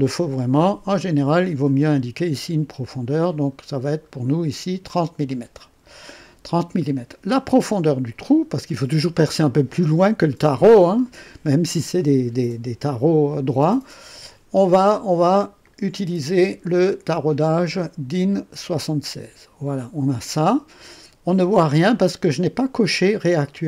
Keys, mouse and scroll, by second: 2.0 scroll up 1, 2.7 scroll up 1, 3.6-4.2 scroll up 3, 4.5 scroll down 2, 15.6 click, 18.6 click.